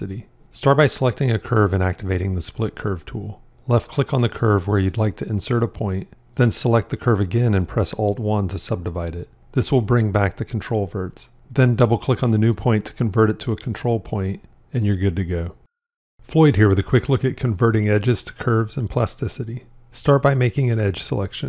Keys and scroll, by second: 8.6 alt+1.